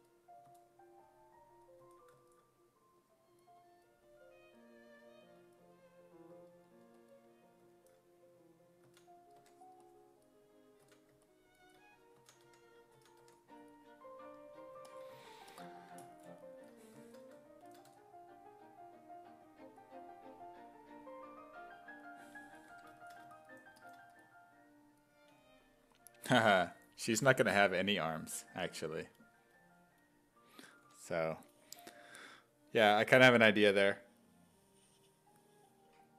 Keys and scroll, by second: 0.5 s, 1.8 s, 8.9 s, 9.4 1, 10.9 s, 12.0-13.7 typing, 17.9 w, 22.7 1, 30.9 1.